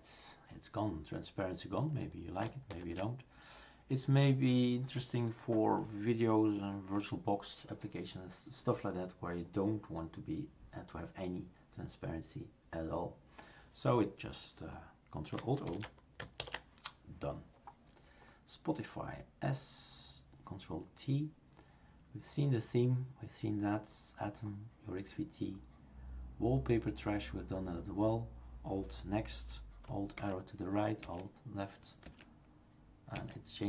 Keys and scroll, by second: 2.7 ctrl+alt+o, 15.6 ctrl+alt+o, 30.2 alt+Left, 33.1 alt+Right.